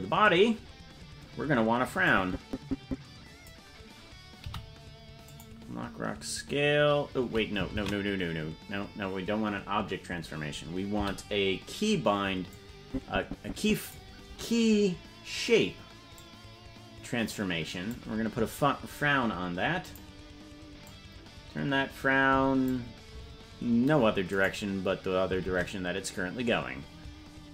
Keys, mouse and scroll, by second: 2.2-3.7 drag, 4.8 i, 8.4 ctrl+z, 11.1 i, 13.0-14.2 drag, 16.1-20.1 drag, 21.1-23.0 drag, 24.8 right click, 25.9 ctrl+Tab.